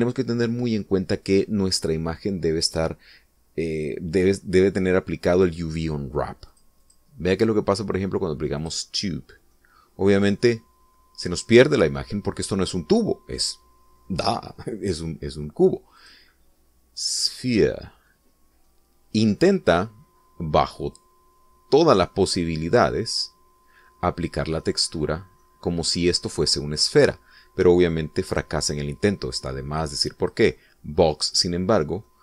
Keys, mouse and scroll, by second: 7.6-8.2 drag, 9.7 click, 10.6-13.4 middle drag, 17.1 click, 18.4 click, 19.4 scroll down 2, 19.8-25.9 middle drag, 26.1 scroll up 1, 26.6 middle click, 29.4 click, 31.3 click.